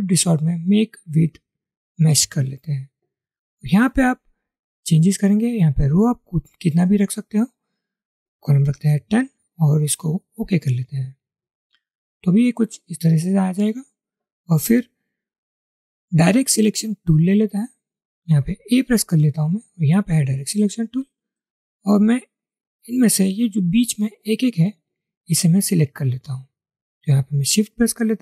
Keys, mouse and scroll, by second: 1.9 click, 6.7-8.7 drag, 8.9-10.2 typing, 12.0 typing, 28.1 shift+click.